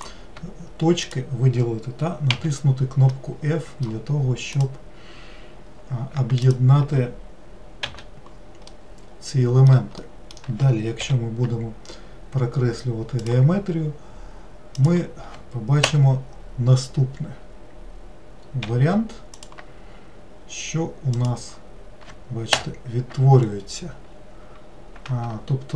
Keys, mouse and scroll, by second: 0.0 click, 1.1 shift+click, 2.3 f, 3.2-4.6 middle drag, 4.6 click, 6.5 shift+click, 7.9 f, 8.7-11.0 middle drag, 11.0 k, 18.7 k, 23.5 scroll up 4, 24.1-24.6 scroll up 1, 24.6-25.2 scroll down 2.